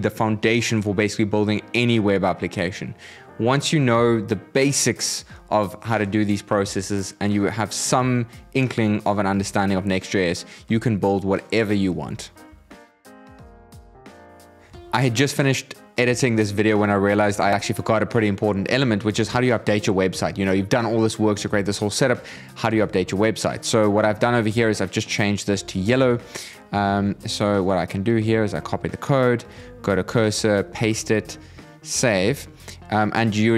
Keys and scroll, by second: 30.1 super+a, 30.4 super+v, 31.7 super+s.